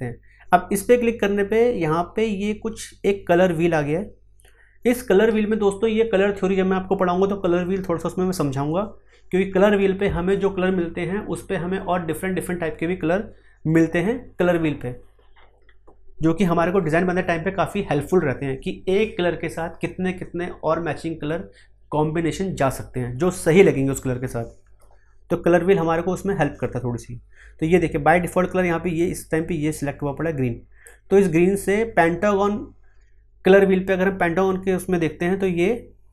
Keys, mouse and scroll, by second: 29.0-36.1 drag.